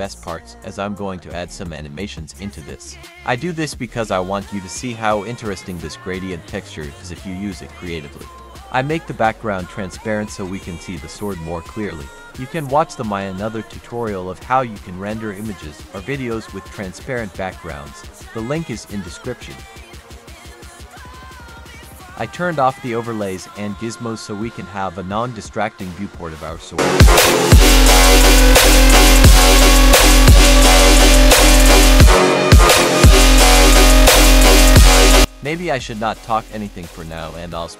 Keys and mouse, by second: 1.8 click, 3.9 click, 7.9 click, 9.6 click, 12.6 click, 14.5 click, 16.0 click, 19.2 shift+middle click, 22.0 click, 28.3 click, 30.4 click, 31.7 click, 32.4 click, 34.1 click, 35.9 F3, 37.6 click.